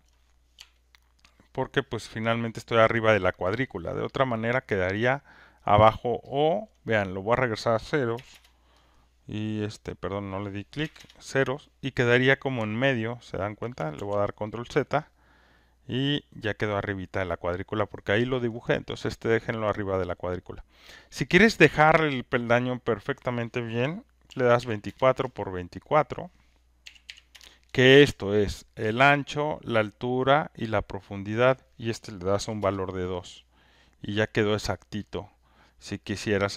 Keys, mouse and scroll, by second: 0.0 click, 2.8 alt+click, 5.6 alt+click, 6.6 alt+click, 8.1 0, 8.3 Return, 9.8 click, 10.8 0, 10.9 Return, 13.6 alt+click, 13.9 ctrl+z, 18.4 alt+click, 21.3 click, 24.0-25.1 typing, 26.0 click, 26.8 typing, 27.0 Return, 31.3 click, 33.7 click, 35.1 click.